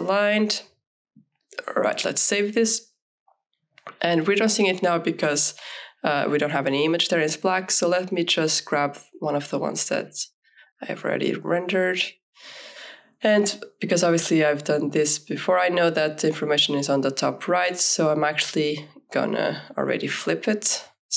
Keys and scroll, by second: 13.5 Return.